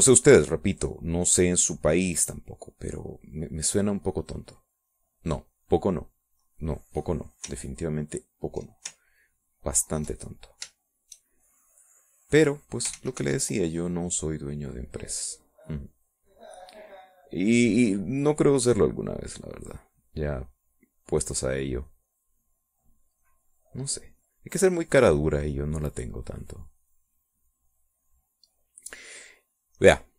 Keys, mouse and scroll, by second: 4.9 middle click, 5.5 middle click, 6.0 middle click, 6.9 middle click, 7.6 middle click, 10.0-11.3 ctrl+drag, 11.9 shift+click, 12.4-13.7 shift+drag, 14.1 ctrl+z, 15.2-21.0 drag, 21.7-25.3 drag, 25.9-28.5 drag, 28.9-30.1 drag.